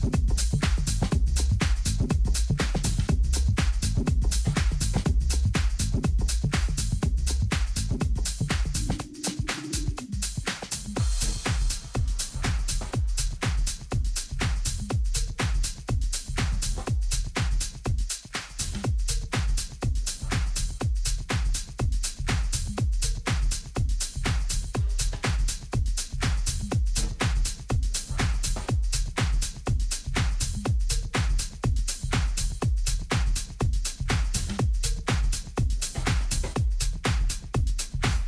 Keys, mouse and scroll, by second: 6.5-8.8 middle drag, 12.9 ctrl+z, 13.7 middle click, 16.3 middle click, 17.4-18.5 right drag, 18.5-21.3 middle drag, 21.3 right click, 21.9-23.0 middle drag, 23.0 right click, 23.8 KP_7, 29.2-32.0 drag, 33.5 ctrl+z.